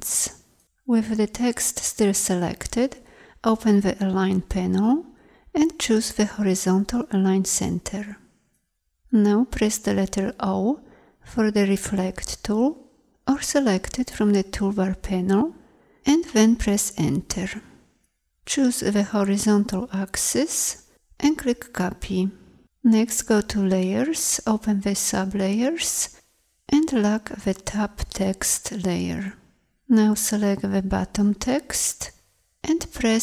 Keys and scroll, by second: 9.4 o, 30.1 v.